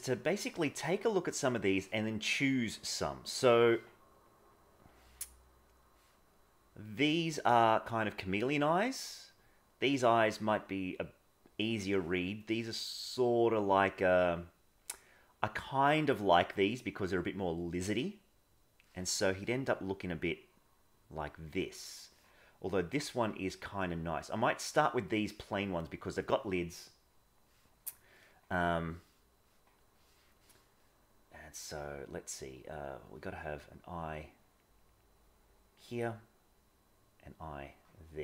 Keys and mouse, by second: 0.3-3.6 middle drag, 19.3 middle click, 25.1 middle click, 27.9 middle click, 29.9 middle click, 33.2 click, 33.5 click, 34.1 click, 34.7 click, 36.3 click, 38.0 click.